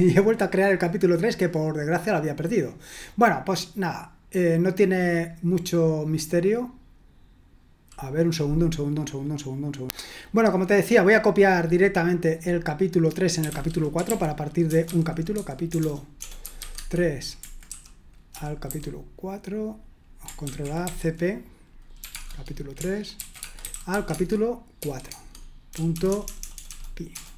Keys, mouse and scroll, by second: 9.7 click, 12.4 click, 13.2-18.7 typing, 20.4 ctrl+a, 20.8 typing, 22.0 typing, 23.2-26.2 typing, 25.9 Tab.